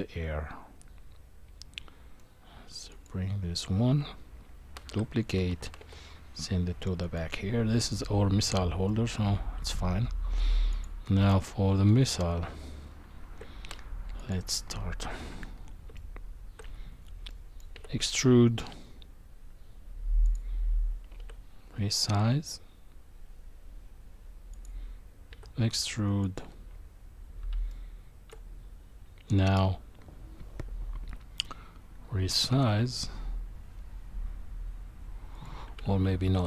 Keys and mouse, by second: 2.9 click, 4.7 shift+d, 8.9-9.7 middle drag, 10.7 click, 11.2-11.9 middle drag, 12.4 Tab, 14.2 click, 15.9 shift+middle click, 17.3 middle click, 17.7 e, 21.2 s, 25.3 e, 27.7 shift+middle click, 31.0 s, 35.9 ctrl+z.